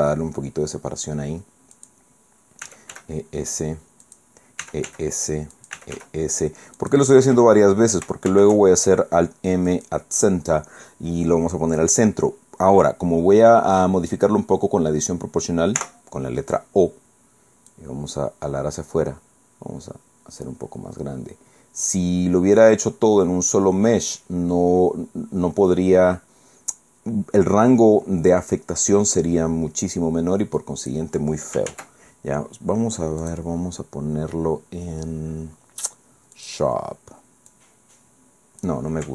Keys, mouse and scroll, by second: 1.8 click, 2.6 e, 2.9 s, 4.0 click, 4.6 e, 4.8 s, 5.6 click, 5.8 e, 6.0 s, 6.8 click, 8.3 alt+m, 9.7 click, 15.8 o, 17.7-19.4 drag, 19.4-19.8 scroll down 1, 20.0 scroll down 1, 20.6 scroll down 1, 22.1 scroll down 1, 31.7 ctrl+z, 33.2 click, 36.4 click, 37.5-38.8 drag.